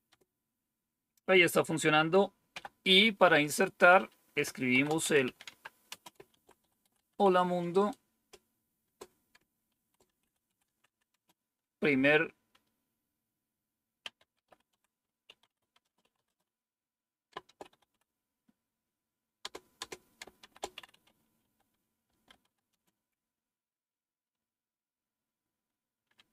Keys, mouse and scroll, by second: 0.0 typing, 2.2-2.9 typing, 4.6-11.5 typing, 13.7-17.4 typing, 19.3-23.1 typing.